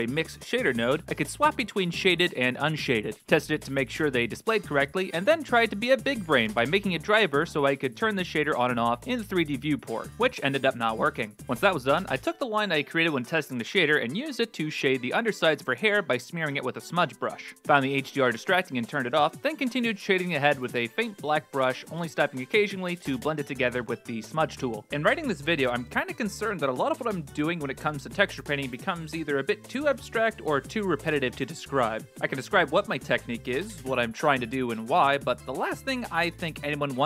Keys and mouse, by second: 1.5 click, 2.4 middle click, 3.3 middle click, 4.4 middle click, 4.9 middle click, 5.1 ctrl+space, 8.2-10.6 drag, 11.2 middle click, 11.8 click, 12.1 middle click, 12.2 click, 12.9 3, 13.0 f, 13.1 click, 13.2 click, 13.4 r, 13.6 click, 13.7 click, 14.6 middle click, 14.8 click, 15.5 click, 15.8 click, 16.2 click, 16.3 click, 16.4 click, 16.6 click, 17.0 click, 17.2 middle click, 17.3 click, 17.4 middle click, 17.6 shift+middle click, 18.4 click, 18.8 click, 19.1 right click, 19.2-20.0 typing, 19.5 ctrl+z, 19.7 right click, 20.0 middle click, 20.3 middle click, 20.5 middle click, 21.1 click, 21.2 click, 22.2 click, 22.8 click, 22.9 click, 23.5 click, 23.5 f, 24.3 middle click, 24.4 middle click, 24.8 click, 25.0 middle click, 25.4 middle click, 25.7 f, 25.8 f, 25.9 click, 26.3 click, 26.4 f, 26.4 click, 26.5 click, 27.1 click, 27.1 middle click, 27.4 ctrl+z, 28.1 middle click, 28.5 click, 28.7 x, 28.7 s, 28.9 middle click, 29.2 middle click, 29.5 s, 29.6 click, 30.3 middle click, 30.5 middle click, 30.5 click, 30.7 shift+f, 30.8 click, 31.1 s, 31.4 middle click, 31.8 click, 32.4 shift+f, 32.5 click, 32.8 click, 33.3 shift+f, 33.4 e, 33.6 click, 33.8 click, 34.1 middle click, 34.6 click, 34.6 3, 34.9 click, 35.0 middle click, 35.3 click, 35.5 ctrl+z, 35.6 middle click, 35.9 click, 36.0 click, 36.3 f, 36.3 click, 36.5 click, 36.7 ctrl+z, 36.8 click.